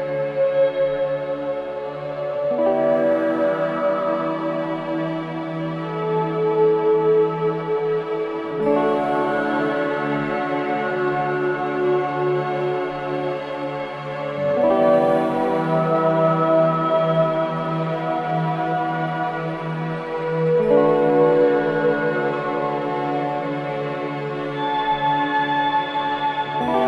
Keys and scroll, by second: 16.6 ctrl+i, 19.8 ctrl+i, 21.7 ctrl+d.